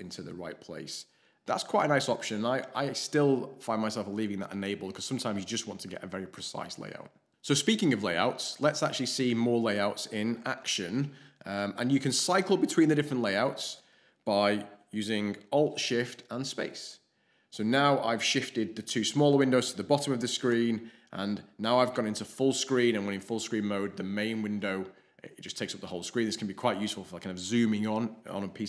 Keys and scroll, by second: 16.7 alt+shift+space, 20.3 alt+shift+space.